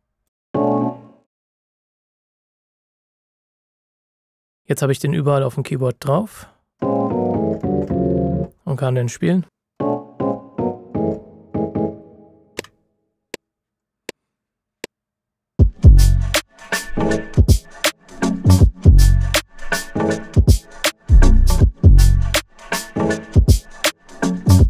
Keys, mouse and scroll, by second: 0.4 space, 1.5 click, 6.3-6.7 scroll down 1, 6.7 click, 13.7 KP_Multiply.